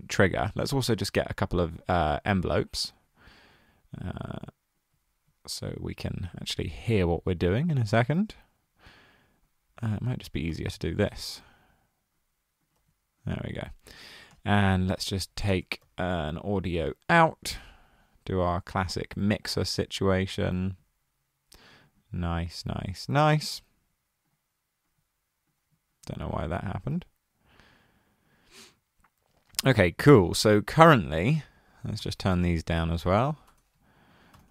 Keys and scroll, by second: 0.7-1.5 typing, 10.5 super+d, 12.8 super+d, 15.0-16.3 typing, 31.8-34.5 typing.